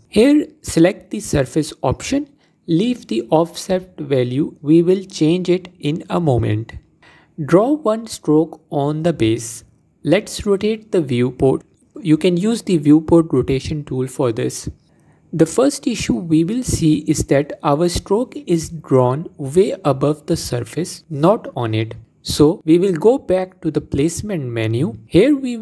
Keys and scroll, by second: 25.1 ctrl+z.